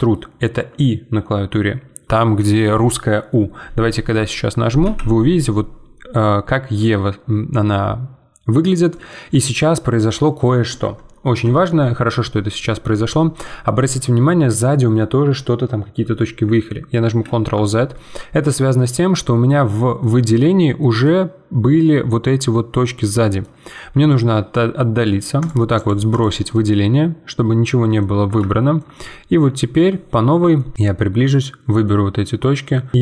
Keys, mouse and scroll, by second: 17.2 ctrl+z, 17.9-20.2 middle drag, 20.2-20.6 scroll up 2, 20.6-23.6 shift+middle drag, 23.6-24.1 scroll down 6, 24.1-25.4 shift+middle drag, 25.4-26.5 drag, 26.5-30.0 middle drag, 30.0-30.5 scroll up 2, 30.5 shift+middle click, 30.7 click, 31.8-32.9 middle drag, 32.9 click.